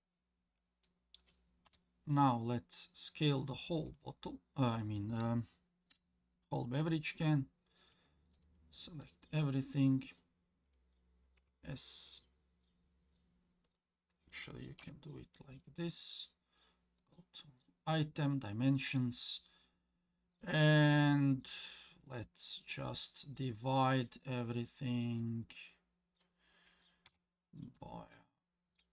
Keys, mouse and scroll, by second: 0.0 click, 0.3 scroll down 1, 0.8-1.2 middle drag, 1.7 KP_1, 2.5 click, 2.9-3.4 scroll down 2, 8.3 shift+click, 9.0 shift+click, 11.4 s, 14.8 n, 17.0 click, 23.4-28.9 drag.